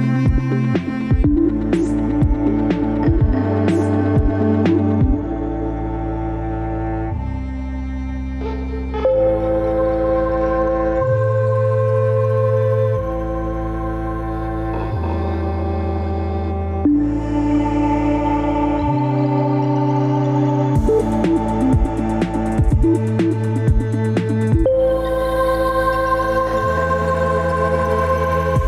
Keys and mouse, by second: 6.8 ctrl+z, 7.0 ctrl+z, 10.2 Tab, 10.7 Tab, 16.7-17.3 drag, 17.3 Tab, 17.8 Tab, 18.6 a, 20.1 e, 22.0 middle drag, 22.5-23.7 middle drag, 25.1-25.6 right drag, 25.6 click, 26.0-26.8 middle drag, 27.2 ctrl+z, 27.4 ctrl+z.